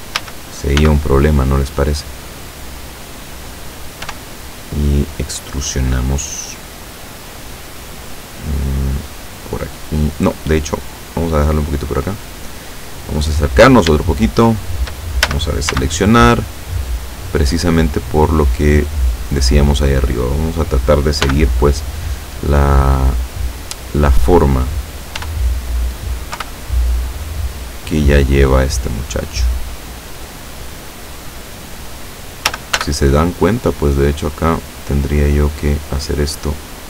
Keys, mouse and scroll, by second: 0.2 a, 0.8 b, 1.5-3.0 drag, 3.0-4.1 scroll up 1, 4.1-4.6 scroll up 1, 4.1 e, 4.6-7.0 scroll up 1, 12.2 click, 13.1-13.5 scroll up 1, 14.0-15.0 shift+middle drag, 15.3 shift+a, 15.8 shift+b, 16.2-18.0 shift+drag, 18.6-20.6 drag, 20.6-22.4 middle drag, 21.3 b, 23.1-24.2 drag, 25.2 e, 26.4 y, 31.0 click, 32.6 a, 32.8 b, 34.4-35.6 drag, 36.3-36.8 drag.